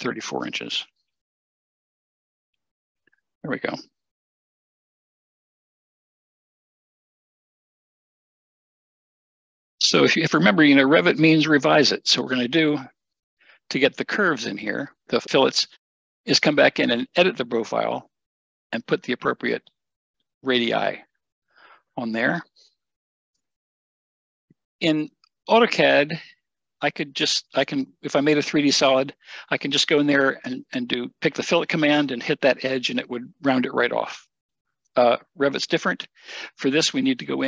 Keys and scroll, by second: 0.5 3, 1.7 Return.